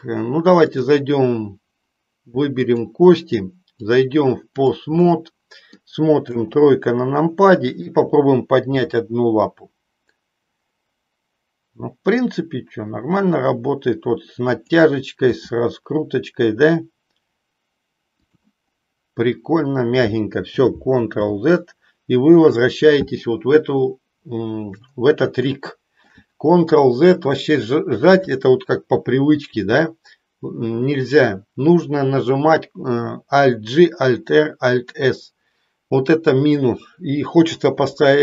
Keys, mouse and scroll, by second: 0.8-1.8 drag, 2.8 click, 3.7-4.8 drag, 5.1 middle click, 6.3 KP_3, 8.8 g, 14.5 click, 15.4 r, 18.3 click, 21.0 ctrl+z, 25.5 shift+middle click.